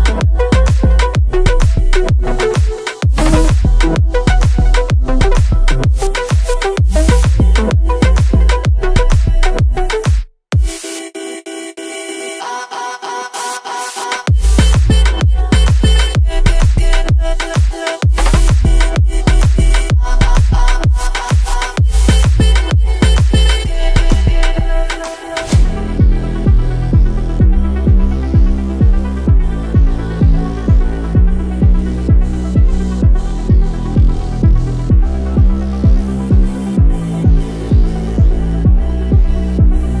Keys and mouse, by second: 2.0 click, 3.1-4.4 middle drag, 5.5 click, 6.8 middle click, 7.8-10.8 drag, 11.9 ctrl+middle click, 12.5 middle click, 12.9 ctrl+middle click, 13.4 middle click, 14.3 ctrl+middle click, 14.7 middle click, 15.0 ctrl+middle click, 15.3 middle click, 16.2-21.4 drag, 21.7 click, 23.6 ctrl+middle click, 24.0 middle click, 24.2 middle click, 24.5 middle click, 25.3 middle click, 26.0-27.3 drag, 27.5-29.6 middle drag, 30.3 ctrl+middle click, 30.6 middle click, 32.0-33.4 drag, 33.6-35.6 middle drag, 36.1 click, 37.2-40.0 middle drag.